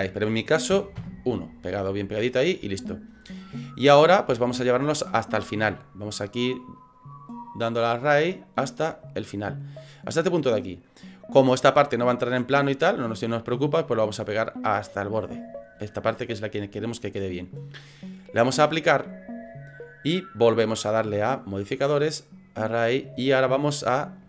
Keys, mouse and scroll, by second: 1.6 scroll down 5, 2.3 scroll down 2, 2.7 shift+middle click, 3.4-3.9 scroll down 3, 4.3 shift+middle click, 6.2 click, 6.5 click, 6.7 click, 6.9 click, 6.9-7.5 click, 7.1 click, 7.3 click, 7.7 click, 7.8 click, 8.0 click, 8.2 click, 8.3 click, 8.6 click, 9.0 click, 12.9 click, 19.4 click, 21.2 click, 24.0 click.